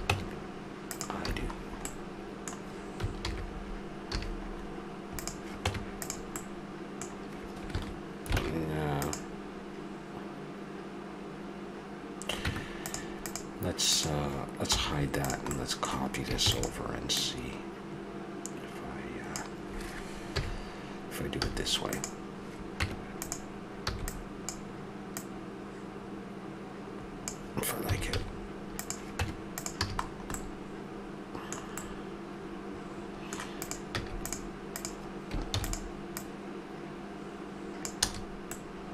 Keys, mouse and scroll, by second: 0.1 Tab, 1.2 a, 1.9-3.1 middle drag, 3.2 alt+h, 4.1 a, 5.2-5.7 right drag, 5.7 Tab, 8.4 ctrl+Tab, 12.4 Tab, 13.2-15.4 right drag, 14.6 h, 15.6 middle click, 16.4 shift+d, 20.3 KP_1, 21.4 z, 22.8 Tab, 23.9 b, 27.8 a, 28.1 z, 29.2 Tab, 29.9 a, 30.3-30.9 middle drag, 33.6-36.7 drag, 33.9 x, 35.5 shift+d, 38.1 a.